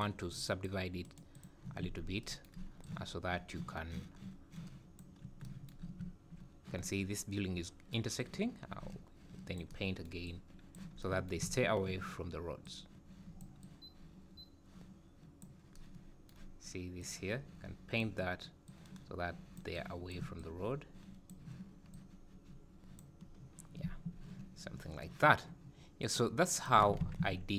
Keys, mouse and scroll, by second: 1.0 right click, 1.9 Tab, 2.8 click, 5.2 scroll down 3, 8.2 click, 10.3 click, 12.7 click, 13.6 click, 17.0 click, 18.7 click, 19.8 click, 20.4 click, 21.9 click, 23.3-23.8 scroll down 5, 23.8 `, 26.0 click, 27.0 alt+a, 27.2 `, 27.5 scroll up 5.